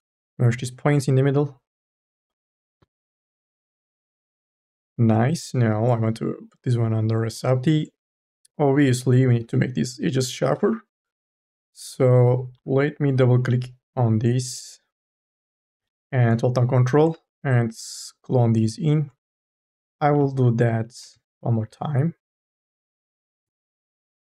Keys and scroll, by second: 9.2 q, 12.2 2, 12.5 e, 15.6 m, 15.9 o.